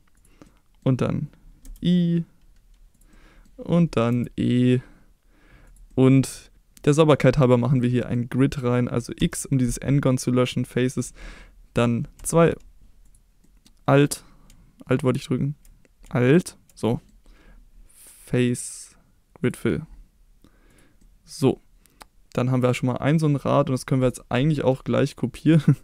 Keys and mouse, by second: 0.1 click, 0.4 middle click, 1.6 i, 2.9 click, 3.1 middle click, 4.1 e, 5.6 click, 5.9 middle click, 6.5 middle click, 7.8 middle click, 9.1 x, 12.1 2, 13.0 click, 13.4 middle click, 15.0 alt+click, 16.2 alt+click, 16.8 middle click, 18.4-19.5 drag, 21.0-22.7 middle drag.